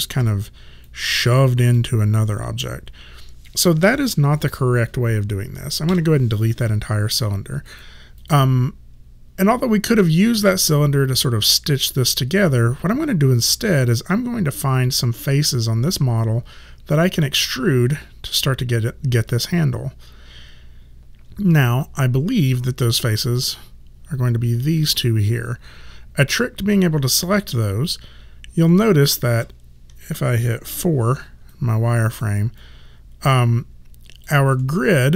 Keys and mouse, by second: 0.2 w, 0.9 click, 7.7 click, 21.9 right click, 28.7 alt+click, 30.8 4, 31.6 alt+right click, 32.7 alt+click, 34.7 alt+middle click.